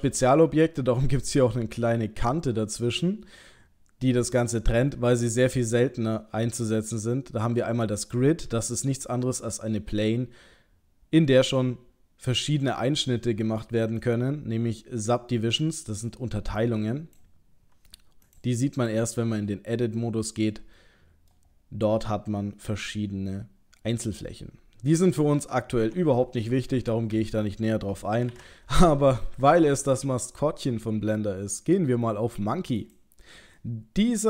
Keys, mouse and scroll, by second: 12.3 middle click, 14.0 click, 16.6 click, 18.3 click, 18.8 click, 19.2 Tab, 20.0 middle click, 21.6-22.0 scroll up 6, 22.7-23.0 scroll up 1, 24.3-25.7 scroll down 7, 25.8 Tab, 27.1 Delete, 28.3 shift+a, 33.6 middle click.